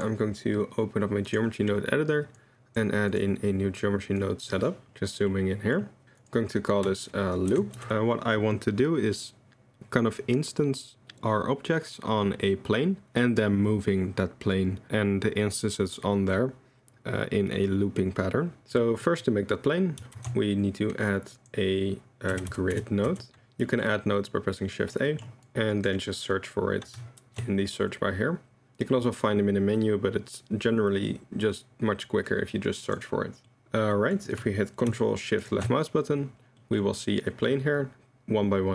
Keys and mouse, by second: 0.0-1.4 drag, 2.4 right click, 2.4-3.2 drag, 4.2 click, 5.3 click, 6.3-7.9 drag, 18.6 click, 19.2 middle click, 20.2 shift+a, 23.7 middle click, 24.3 click, 25.1 middle click, 25.4 click, 27.2 shift+a, 32.8 click, 34.1 click, 35.4 ctrl+shift+click, 36.6 drag, 37.3 click.